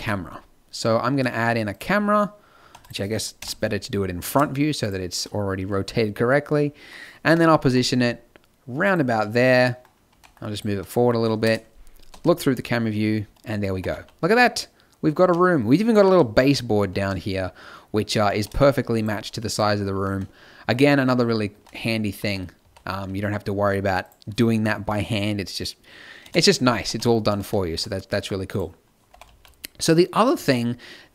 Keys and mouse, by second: 2.6 x, 3.4 KP_1, 4.1 shift+a, 7.2 KP_1, 7.6 g, 10.0 g, 11.4 KP_0, 12.0 z, 13.6 r, 15.8-17.2 drag, 16.0 z, 16.9 z, 18.4 n, 18.9 click, 19.8 z, 20.3 click, 21.4 z, 22.5 z, 23.9-26.1 drag, 26.1 KP_0, 26.8 z, 29.0-30.4 drag, 29.0 r.